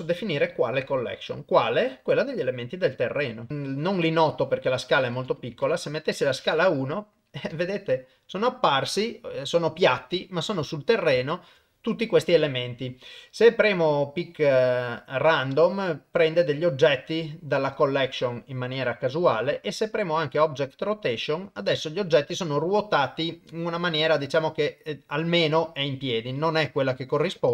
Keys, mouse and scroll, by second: 1.2-3.1 drag, 3.5 middle click, 5.0 click, 6.4 middle click, 7.6 ctrl+middle click, 8.4-10.5 middle drag, 10.7 ctrl+middle click, 11.2 shift+middle click, 15.9 click, 20.2 click, 20.9-26.4 middle drag, 27.3 KP_0.